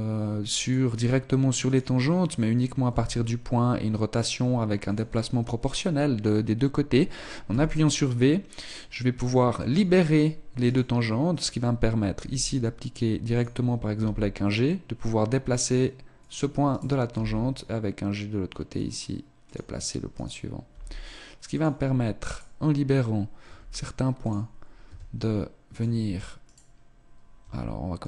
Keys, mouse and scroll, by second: 1.6 right click, 2.8 s, 7.4 v, 10.0 right click, 12.1 r, 13.9 g, 16.3 right click, 16.3 g, 19.5 click, 20.1 right click, 20.6 g, 21.6 click, 22.2 right click, 22.6 r, 24.8 s, 26.4 right click, 27.4 r.